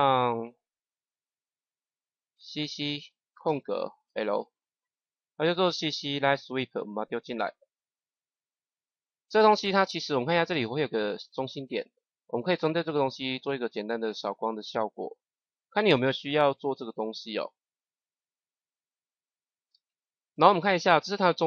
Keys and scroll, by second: 2.4 c, 3.2 space, 3.9 l.